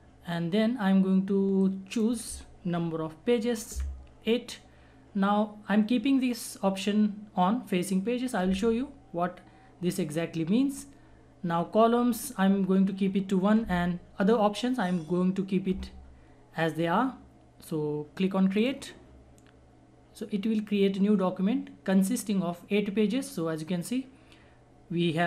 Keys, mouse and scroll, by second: 1.6-18.6 drag.